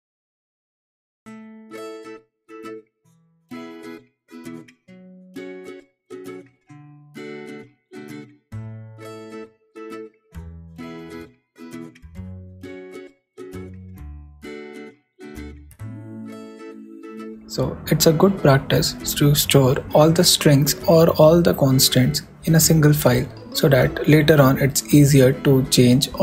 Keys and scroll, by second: 0.0 super+m, 0.1 super+s, 4.3 shift+=, 4.9 shift+', 5.2 shift+2, 5.8 super+s, 6.4 super+Right, 7.3 shift+Right, 8.4 shift+[, 8.6 shift+], 9.1 shift+Left, 11.5 shift+super+s, 14.5 super+Up, 14.7 super+Right, 15.1 super+Return, 15.5 super+/, 16.1 shift+super+w, 16.3 shift+e.